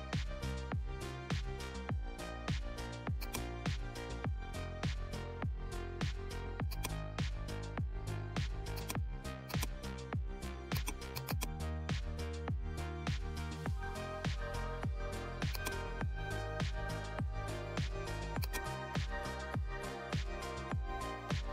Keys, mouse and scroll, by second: 1.9 click, 3.1-5.4 drag, 6.7 click, 8.7-10.7 drag, 15.5-18.4 drag, 18.4-21.5 drag.